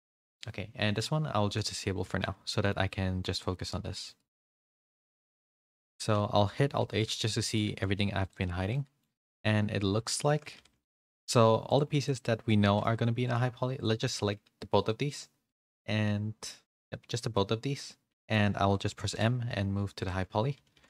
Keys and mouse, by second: 1.5 click, 2.2 a, 2.4 shift+middle drag, 3.5 g, 5.0 a, 5.2 a, 6.7 alt+h, 7.2 middle click, 7.6 a, 7.8 a, 8.7-9.0 middle drag, 9.2 click, 9.8 h, 10.2 shift+middle drag, 10.5 a, 10.7 a, 10.8 middle drag, 11.6 click, 12.6 middle drag, 12.9 g, 14.6 g, 15.7-17.0 middle drag, 17.3-18.2 middle drag, 19.1 m, 20.5 a, 20.7 a.